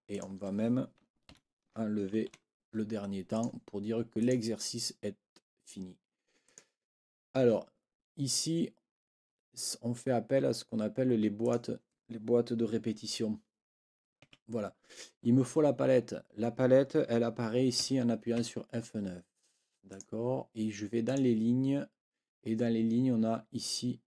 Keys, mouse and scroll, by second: 0.1 click, 1.3 shift+Right, 2.2 Delete, 3.3 click, 4.2 click, 6.4 click, 11.4 click, 14.1 F8, 14.2 F9, 17.8 F9, 19.9 click, 21.0 click.